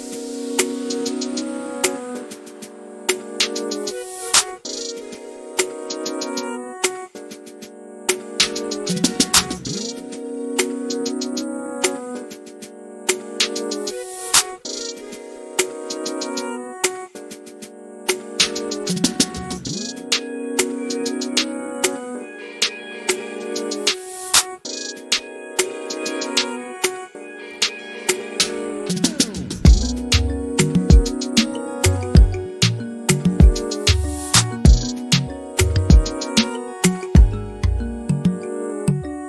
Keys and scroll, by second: 1.1-1.9 typing, 8.5 q, 9.8-11.1 typing, 12.5 space, 13.4 f, 15.4-16.2 typing, 21.6 p, 23.2-24.2 typing, 24.3 Return.